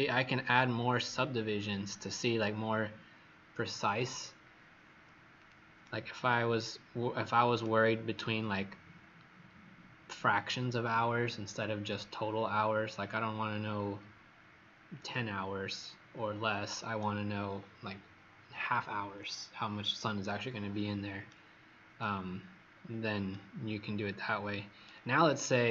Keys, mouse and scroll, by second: 5.8 right click, 22.7-23.3 scroll up 2, 23.3 right click, 23.3 scroll up 1, 25.4-25.7 scroll down 2.